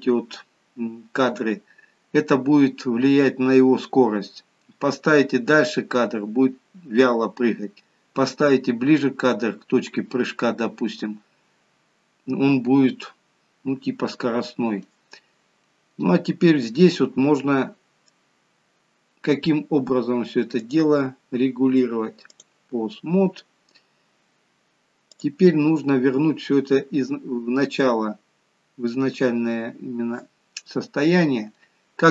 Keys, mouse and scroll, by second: 16.7 middle click, 20.7 click, 23.3-23.7 scroll up 1, 25.7 click, 28.5-31.5 scroll down 1.